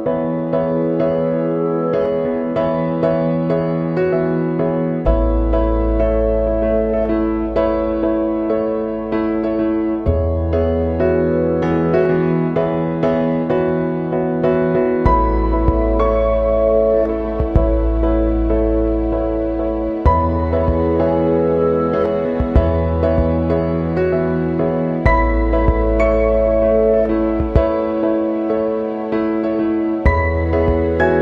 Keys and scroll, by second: 0.9 Down, 1.2 Left, 1.7 Down, 5.3 Up, 5.5 Right, 6.6 ctrl+[, 9.6 ctrl+c, 9.8 ctrl+v, 16.7 Down, 22.4 Right, 23.1 Left, 24.0 ctrl+[, 26.5 ctrl+0, 29.8 ctrl+c, 30.1 ctrl+v.